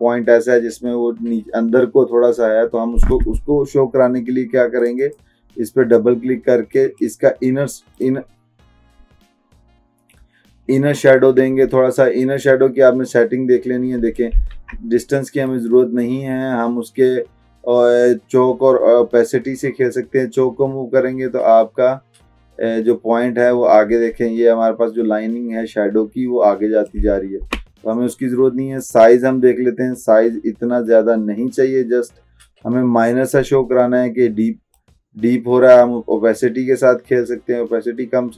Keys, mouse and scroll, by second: 4.9 click, 13.5-14.4 drag, 14.7 ctrl+z, 15.6-27.1 drag, 27.5 ctrl+z, 29.2-33.6 drag.